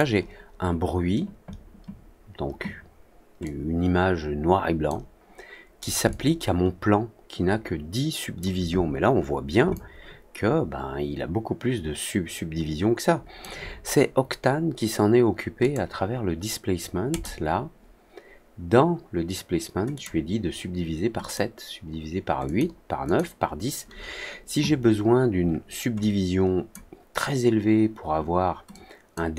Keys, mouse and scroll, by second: 3.4-4.8 drag, 6.0-8.3 alt+drag, 9.7-13.3 alt+drag, 15.5 click, 17.0 click, 19.9 click, 21.1 click, 22.4 click, 23.0 click, 25.9 click, 28.6 click.